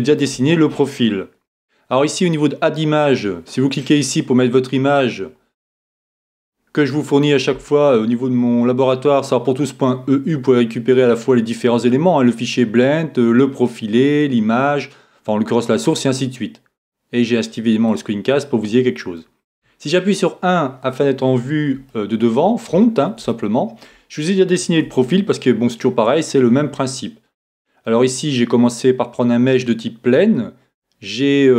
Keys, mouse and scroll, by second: 1.8-2.8 scroll up 1, 2.8-4.7 scroll down 1, 4.7 middle click, 5.2-7.1 scroll down 1, 7.1-17.9 scroll down 1, 17.9-19.8 drag, 19.6 KP_1, 21.9-25.2 middle drag, 24.8 Tab, 25.4-27.8 middle drag, 29.2-31.0 middle drag, 31.0-31.5 scroll up 1.